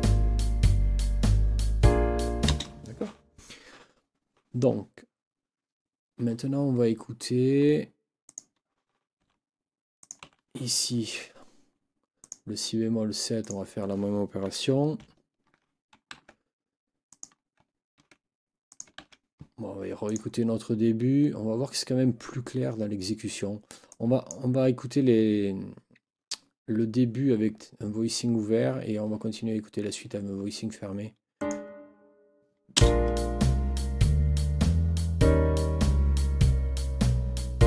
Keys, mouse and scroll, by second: 2.5 space, 8.3 click, 9.2 Delete, 10.0 click, 10.2 Delete, 13.4 click, 15.0 shift+Down, 16.1 ctrl+c, 17.1 click, 18.0 ctrl+v, 18.7 ctrl+click, 19.0 ctrl+v, 20.2 click, 23.9 click, 31.3 click, 32.7 space.